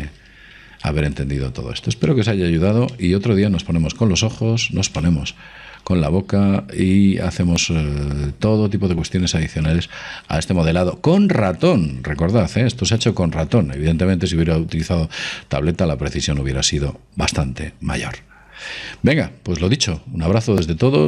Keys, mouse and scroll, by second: 0.0 KP_5, 0.8-1.9 middle drag.